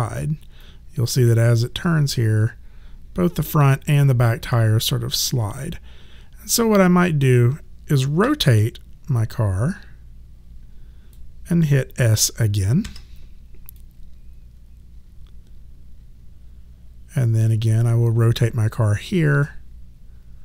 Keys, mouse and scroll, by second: 0.6 click, 8.2 e, 9.1 click, 12.8 s, 13.8 click.